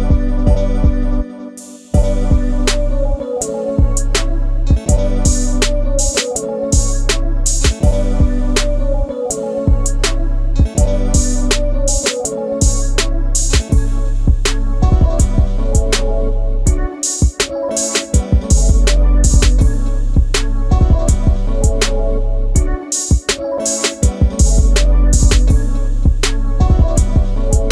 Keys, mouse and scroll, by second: 1.3 middle click, 2.4 space, 3.1 middle click, 3.7 click, 4.5 shift+double click, 4.6 click, 5.3 ctrl+g, 6.1 ctrl+z, 7.9 click, 8.1 click, 8.7 click, 9.1 middle click, 9.2 shift+double middle click, 9.6 ctrl+x, 10.4 shift+double middle click, 10.7 ctrl+v, 11.8 ctrl+g, 12.5 space, 13.1 ctrl+a, 13.7 j, 15.1 space, 15.3 Escape, 16.6 m, 18.9 space, 19.7 middle click, 20.6 j, 22.6 space, 24.2 ctrl+f, 25.1 space, 25.3 Escape.